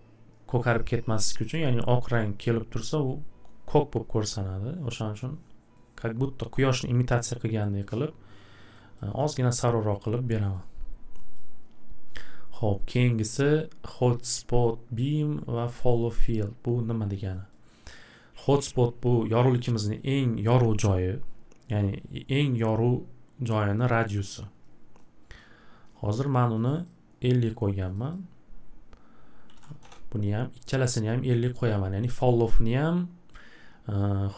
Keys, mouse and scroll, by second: 6.0 click, 7.8 click, 8.9 click, 10.0 click, 10.5 click, 11.3 click, 17.5 click, 23.8 click, 24.1 click, 25.4 click, 26.7 click, 26.8 click, 27.9 click, 28.1 click, 29.2-30.0 typing, 30.9 click, 31.1 click, 31.7 click, 32.3 click, 32.3 typing.